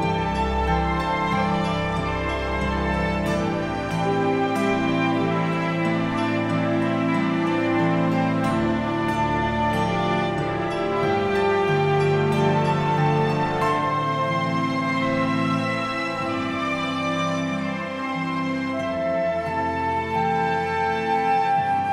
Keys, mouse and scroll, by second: 0.0 middle click, 0.1-1.0 scroll down 4, 0.2 shift+middle click, 0.8 click, 1.0 middle click, 1.3 alt+d, 1.6 shift+middle click, 1.8 r, 2.3 scroll up 2, 2.5 click, 4.2 scroll up 5, 4.3 shift+middle click, 4.5 click, 5.6 alt+a, 5.6-6.2 scroll down 15, 5.8 shift+middle click, 6.0 scroll up 1, 6.2 click, 6.6 click, 7.3 click, 7.3 KP_Decimal, 7.5 scroll down 1, 8.5 scroll down 3, 8.6 shift+middle click, 8.9 click, 10.6 alt+a, 10.8 shift+middle click, 10.8 scroll down 8, 10.9 scroll up 2, 11.1 click, 11.2 middle click, 11.6 click, 12.2 click, 12.7-13.1 scroll up 4, 12.8 shift+middle click, 13.1 click, 13.7 r, 14.4 alt+a, 14.4-14.8 scroll down 13, 14.7 scroll up 4, 14.8 scroll down 2, 14.9-15.4 scroll up 10, 15.2 click, 15.4 click, 16.2 scroll down 5, 16.3 shift+middle click, 16.4 scroll up 1, 16.5 click, 17.6 click, 18.3 KP_Decimal, 18.5-18.8 scroll down 6, 18.6 middle click, 18.8 click, 19.1 scroll down 1, 19.2 shift+middle click, 19.3 scroll up 3, 19.4 click, 19.8 click, 20.8 click, 21.1-21.7 scroll down 6, 21.2 alt+a, 21.5 shift+middle click, 21.7 scroll up 2, 21.7 middle click, 21.8 shift+middle click.